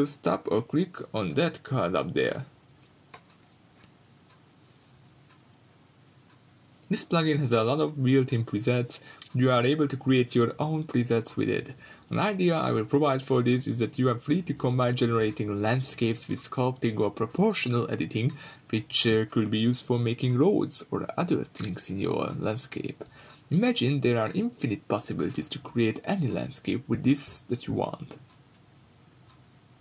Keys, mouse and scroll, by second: 1.6-4.1 middle drag, 3.2 scroll down 2, 4.1 scroll up 2, 4.3-4.8 right drag, 4.8 middle click, 5.1-5.5 scroll up 2, 5.5-9.6 drag, 6.2 scroll down 1, 9.6-12.5 middle drag, 9.8-10.3 scroll up 3, 10.6 scroll down 1, 12.1 scroll up 2, 12.5-12.9 right drag, 12.8 scroll down 1, 12.9-15.9 middle drag, 14.4-14.8 scroll down 2, 14.8-15.7 scroll up 2, 15.7 g, 16.2-16.5 drag, 16.5 shift+middle click, 16.7-17.5 scroll up 4, 17.1-18.6 drag, 17.2 Escape, 17.5 scroll down 2, 17.7-18.6 scroll up 2, 18.9-19.9 drag, 19.8 scroll down 2, 19.9 middle click, 20.0-20.4 scroll up 2, 20.4 click, 21.0-22.4 middle drag, 21.4-22.4 scroll down 2, 22.4-28.8 drag, 25.6 scroll up 2, 25.7 scroll down 1, 25.8-26.3 scroll up 1, 28.8-29.8 middle drag, 29.2 scroll up 1, 29.7 scroll down 1.